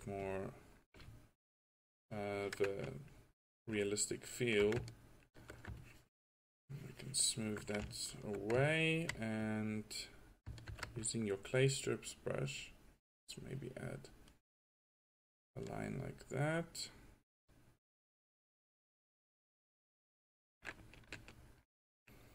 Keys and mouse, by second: 5.4-5.9 drag, 8.1 drag, 10.9 ctrl+z, 15.7 drag, 20.7-22.2 drag, 22.2-22.3 middle drag.